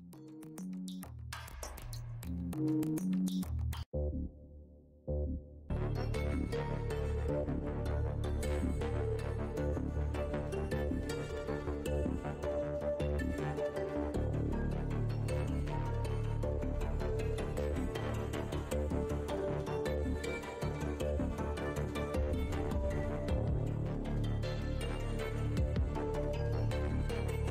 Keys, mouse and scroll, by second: 2.2 click, 3.7 click, 5.7 click, 10.9 click, 11.9 scroll, 12.0-12.3 scroll up 1, 13.0 right click, 13.8-14.3 scroll up 1, 14.6 right click, 15.9 right click, 16.5-17.1 scroll up 1, 17.1-17.8 scroll down 1, 18.0 right click, 19.0 Tab, 19.2 scroll up 1, 20.3-21.0 scroll down 1, 21.0 right click, 23.9 click, 24.5 click, 26.4 click.